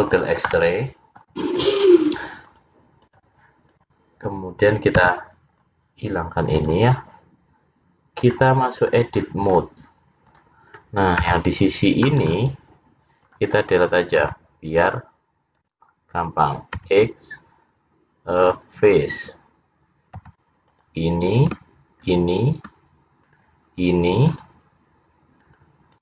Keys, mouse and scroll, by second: 0.2-0.7 scroll down 5, 0.7 middle click, 2.6 click, 3.8 click, 5.1 h, 5.7-6.7 scroll up 1, 6.7 click, 6.7 scroll up 3, 8.7 click, 9.5 scroll up 3, 10.3 click, 11.3 c, 13.3 click, 14.2 c, 16.8 x, 21.2 c.